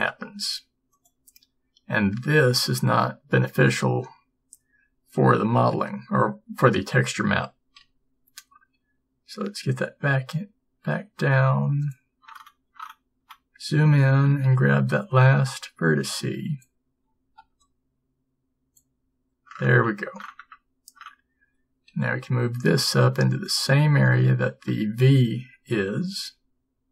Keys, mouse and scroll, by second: 7.9 g, 22.0 g, 26.3 s.